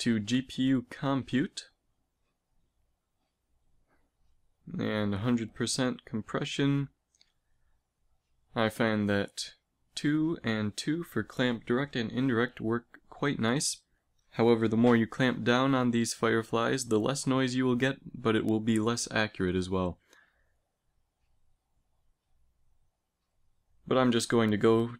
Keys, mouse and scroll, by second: 0.4-4.4 drag, 6.1-10.0 drag, 10.0-11.4 middle drag, 11.4-22.1 drag, 22.1-24.9 middle drag.